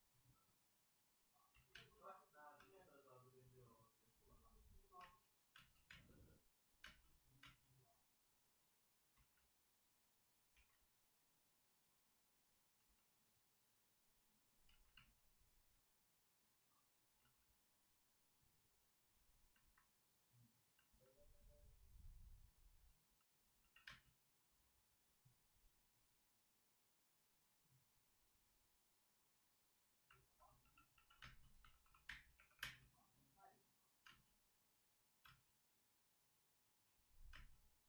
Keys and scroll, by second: 1.4 ctrl+z, 1.6 space, 2.5 space, 4.9 space, 5.4 space, 5.8 space, 9.0 ctrl+z, 10.5 ctrl+z, 13.3 ctrl+z, 14.6 ctrl+z, 17.1 ctrl+z, 23.5 x, 23.8 space, 30.6-32.5 typing, 34.0 space, 35.2 space, 37.3 space.